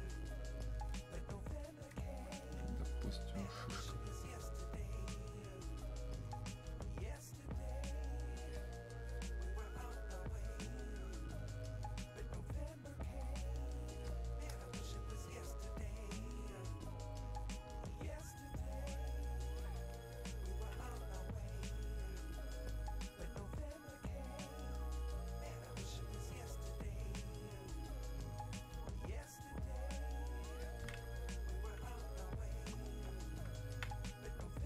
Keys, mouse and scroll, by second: 2.4-15.2 alt+drag, 15.2-27.1 drag, 31.4-34.6 drag.